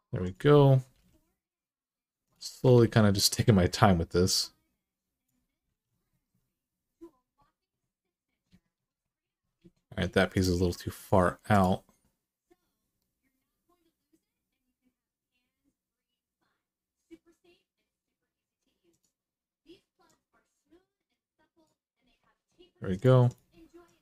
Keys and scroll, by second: 0.7 g, 2.5 alt+z, 5.5 alt+z.